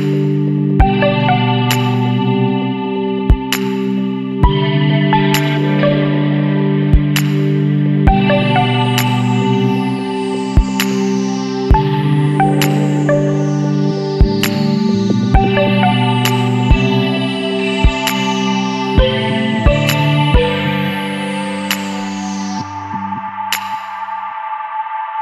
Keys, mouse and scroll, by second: 2.1 click, 3.9 click, 5.2 Escape, 5.9 click, 7.8 click, 9.4 KP_1, 9.7 KP_0, 10.1 KP_Enter, 12.8 click, 14.0 click, 15.4 KP_1, 15.6 KP_4, 15.9 KP_2, 16.4 KP_Enter, 18.6 click, 21.9 click, 23.4 click.